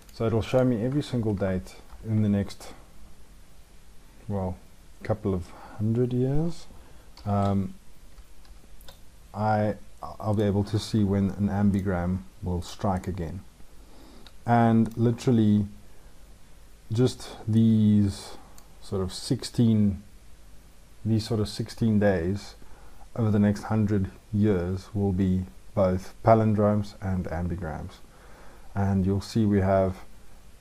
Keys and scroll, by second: 1.3 ctrl+shift+Down, 7.0 ctrl+shift+l.